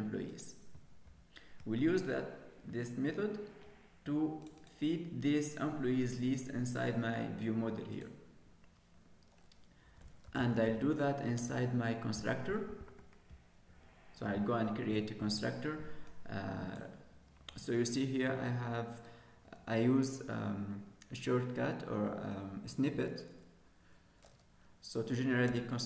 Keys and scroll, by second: 15.2 ctrl+s.